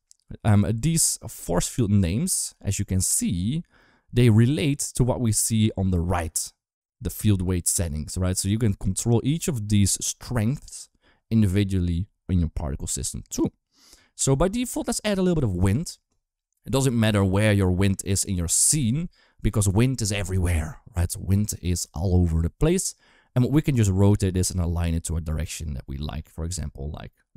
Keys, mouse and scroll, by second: 1.0 q, 2.2 shift+a, 16.3 g, 18.0 typing, 23.3 g, 24.3 r, 27.0 r.